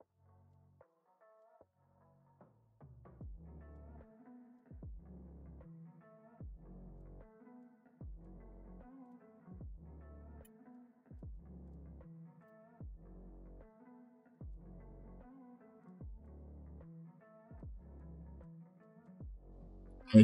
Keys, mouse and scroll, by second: 1.0 ctrl+r, 3.7 click, 4.1 ctrl+r, 4.8 s, 7.0 scroll up 3, 7.5 drag, 9.0 click, 10.7 shift+click, 11.6 click, 12.3 click, 12.9 e, 16.2 click, 17.2 click, 17.3 drag, 17.9 click, 18.7-19.5 drag.